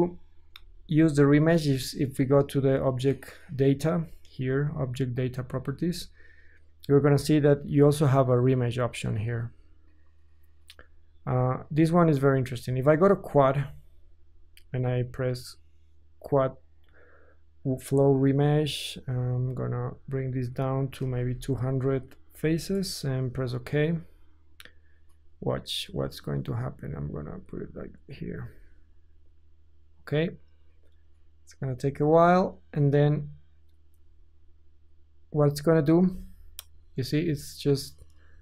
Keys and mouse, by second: 0.4-9.5 ctrl+shift+middle drag, 9.5-13.7 drag, 13.7-17.6 middle drag, 17.6-38.4 drag, 21.4 KP_0, 25.8 middle drag.